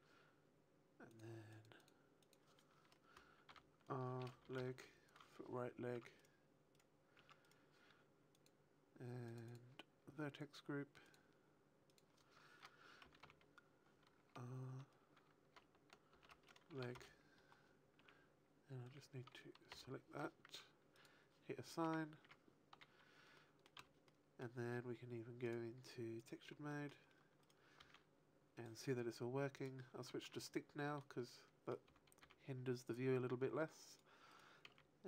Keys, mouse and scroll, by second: 1.0 click, 2.0 click, 3.7 click, 5.9 Tab, 6.1 right click, 6.7 right click, 7.0 Tab, 7.2 right click, 8.2 click, 9.4 click, 11.8 click, 17.9 Tab, 19.1 a, 19.6 l, 21.2 click, 21.8 a, 22.2 Tab, 22.7 a, 23.3 middle click, 23.7 z, 24.0 middle click, 25.3 click, 26.6 middle click, 27.7 r, 28.6 right click, 29.4 click, 30.0 shift+middle click, 30.4 middle click, 31.8 r, 33.9 right click, 34.2 right click, 34.5 r.